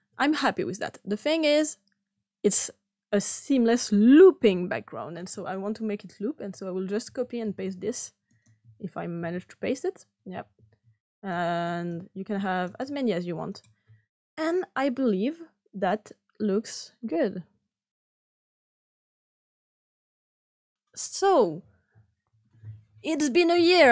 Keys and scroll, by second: 7.0 ctrl+c, 7.4 ctrl+v, 9.9 ctrl+v.